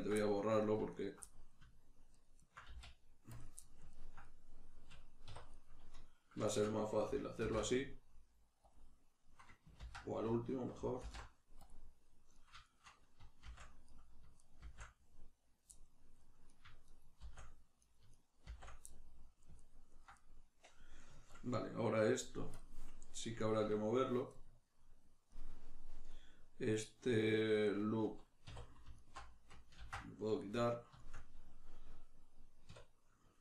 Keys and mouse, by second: 0.1 middle click, 0.9 ctrl+right click, 1.2 middle click, 2.1 ctrl+right click, 2.3 ctrl+right click, 2.7 x, 3.6-5.6 ctrl+middle drag, 5.3 1, 5.6 right click, 6.4 shift+right click, 7.4 alt+m, 9.9 z, 12.4 right click, 12.6 shift+right click, 13.4 shift+r, 13.9 right click, 14.4 shift+right click, 14.6 shift+r, 15.7 middle click, 16.5 right click, 16.9 shift+right click, 17.2 shift+r, 17.8 right click, 18.1 shift+right click, 18.4 shift+r, 18.9-22.6 middle drag, 22.6 click, 23.2 right click, 23.4 shift+right click, 24.4-28.9 middle drag, 28.5 2, 28.9 alt+right click, 29.7 ctrl+x, 30.4-33.4 middle drag, 32.7 \.